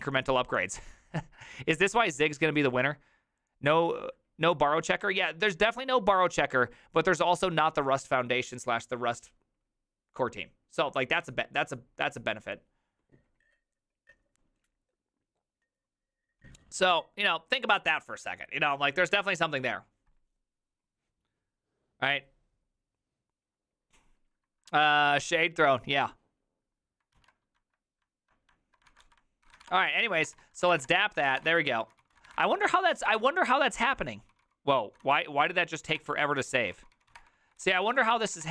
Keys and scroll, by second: 27.2 alt+{, 28.9 ctrl+w, 29.0-38.5 typing, 35.5 ctrl+c.